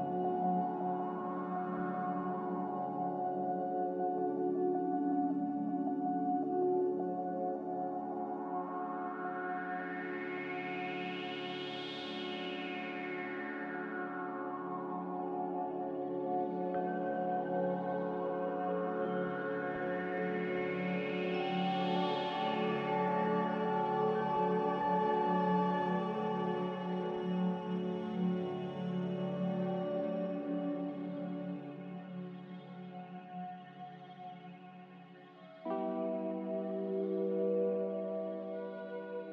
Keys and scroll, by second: 3.4 a, 8.2 n, 14.5 a, 15.6 a, 22.2 5, 31.7 2.